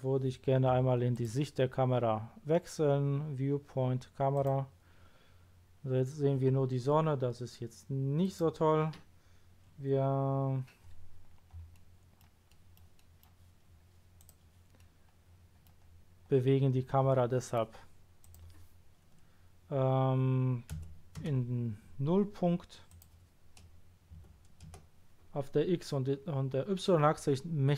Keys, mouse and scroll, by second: 1.1 click, 4.3 click, 8.2 click, 11.7 middle click, 12.5 middle click, 12.9 middle click, 13.6-14.2 scroll down 1, 14.2 click, 14.7-15.6 middle drag, 15.8-16.5 scroll down 2, 16.5 scroll up 1, 18.2 click, 20.7 KP_0, 21.2 Return, 22.9 click, 24.1 KP_0, 24.7 Return.